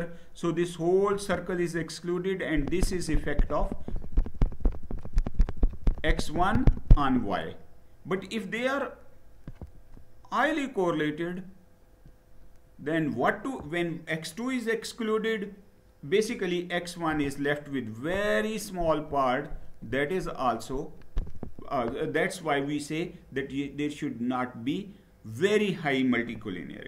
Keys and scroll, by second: 26.6 Down.